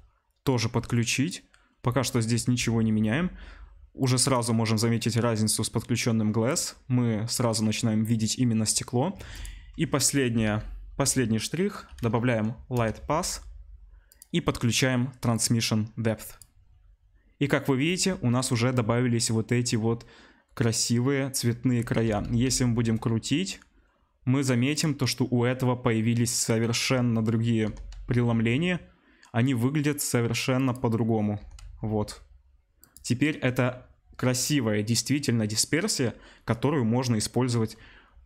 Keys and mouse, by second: 0.4-14.1 drag, 9.2 shift+a, 14.1-15.3 middle drag, 15.3-24.8 drag, 22.0 r, 24.8-38.2 middle drag, 27.6 r, 31.4 r.